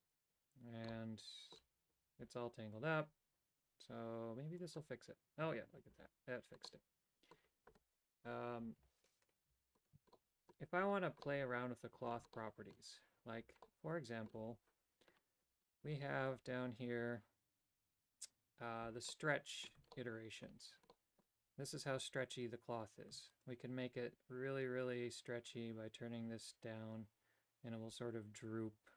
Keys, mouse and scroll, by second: 1.0 middle click, 6.8 middle click, 9.0 KP_7, 10.2 shift+middle click, 11.3 middle click, 12.5 shift+middle click, 13.7 middle click, 19.3 middle click, 20.0 shift+middle click, 21.0 middle click, 23.4-28.9 shift+drag.